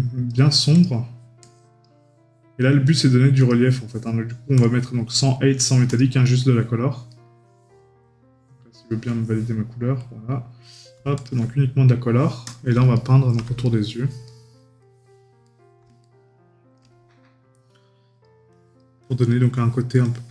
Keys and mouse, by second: 6.2 right click, 12.9 right click, 14.8 middle click, 15.4 right click.